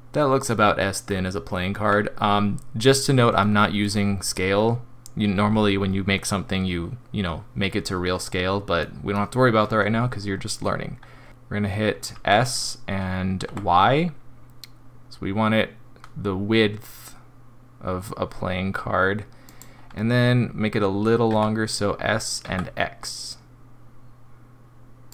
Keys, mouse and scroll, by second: 1.1-2.6 scroll down 1, 2.6-3.4 scroll down 1, 3.4 middle click, 3.9 scroll down 2, 8.8 middle click, 12.1 s, 21.3 s.